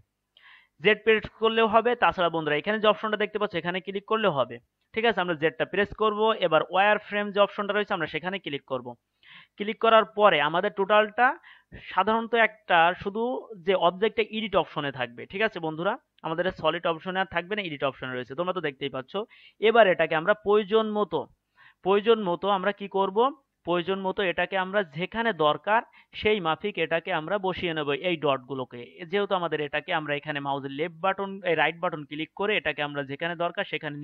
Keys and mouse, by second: 16.6-19.9 drag, 16.6-19.9 right drag, 19.9-22.0 middle drag, 22.0-24.2 drag, 24.2 middle click, 24.7-31.6 middle drag, 31.6-32.7 right drag.